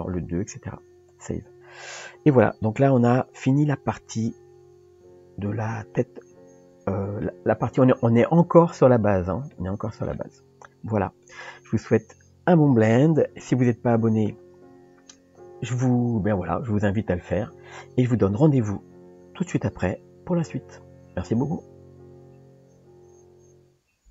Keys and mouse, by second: 2.5-7.2 middle drag, 9.5-10.2 middle drag.